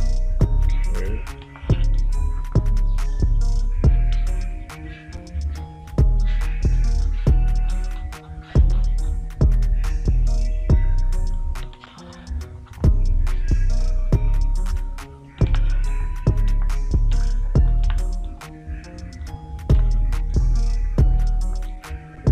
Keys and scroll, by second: 1.9 space, 12.2 space, 16.0 space, 18.3 space, 20.2 space.